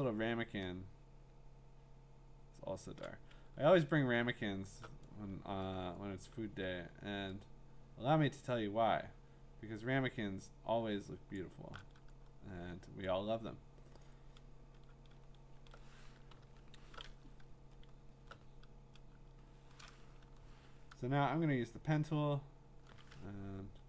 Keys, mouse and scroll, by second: 2.8 shift+click, 3.7-4.4 scroll, 11.3 shift+click, 12.3 scroll, 13.1-15.7 scroll, 16.4 scroll, 18.3-18.7 scroll, 18.3 l, 20.2 p.